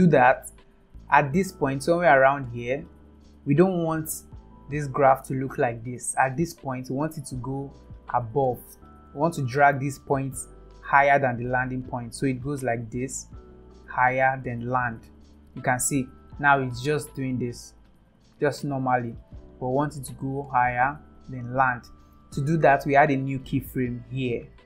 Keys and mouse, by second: 1.2-3.5 drag, 6.6 click, 7.8 click, 24.1 click.